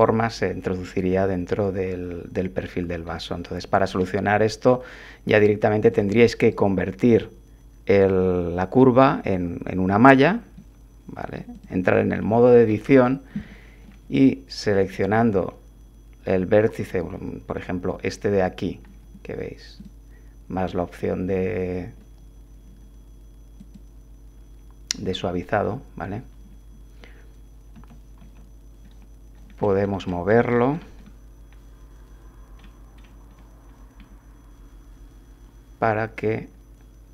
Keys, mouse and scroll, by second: 1.0 1, 3.1 click, 5.9 click, 6.4 right click, 9.2 click, 10.5 Tab, 11.5 click, 12.3 click, 13.5 shift+click, 14.8 click, 19.8 click, 23.6 click, 27.7 g, 28.2 x, 29.7-30.9 scroll up 2, 32.6 middle click, 33.0 middle click.